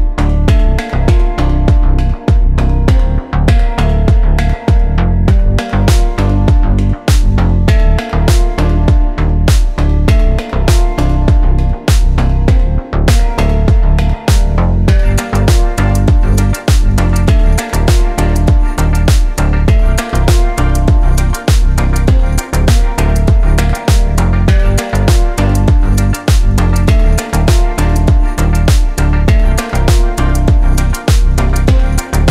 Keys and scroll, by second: 7.9 g, 12.3 g, 15.7 Tab, 22.4 g, 25.3 g, 28.1 g.